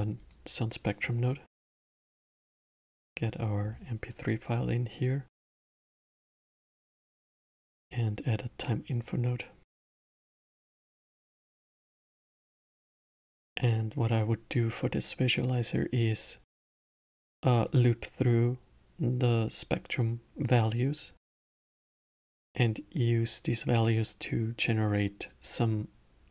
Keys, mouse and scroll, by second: 1.0-5.0 drag, 6.7 shift+a, 9.7-12.6 drag, 12.6-15.5 middle drag, 15.5 click, 19.9 click, 22.0 click, 25.2 click.